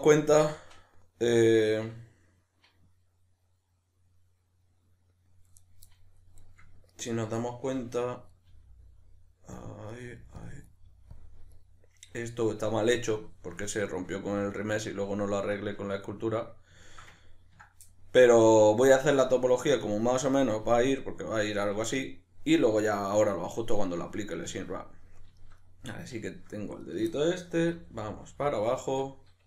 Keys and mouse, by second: 6.4 right click, 6.9 ctrl+right click, 7.4-8.3 middle drag, 8.3 right click, 8.5 g, 9.6 click, 9.9 right click, 10.0 g, 10.4 click, 10.6 right click, 10.9 g, 11.2 click, 11.6 right click, 13.0-26.8 middle drag, 26.8 right click, 27.1-28.6 middle drag, 27.7 e, 28.6 click, 28.9-29.4 middle drag.